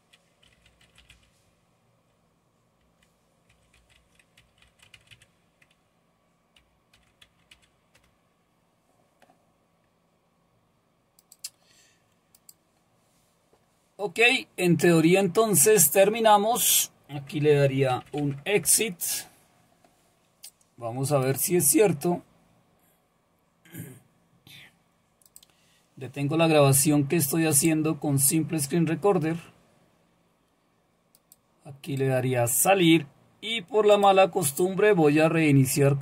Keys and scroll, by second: 0.2-1.6 typing, 2.8-8.0 typing, 17.4-19.1 typing.